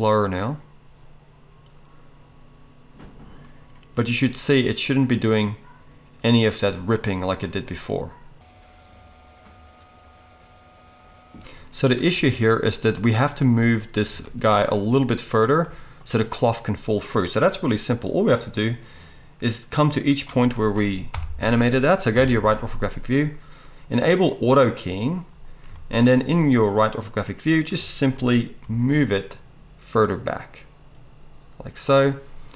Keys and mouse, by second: 11.3 space, 18.4-24.4 drag, 21.1 KP_1, 22.1 KP_3, 24.4-32.5 middle drag, 28.6 g.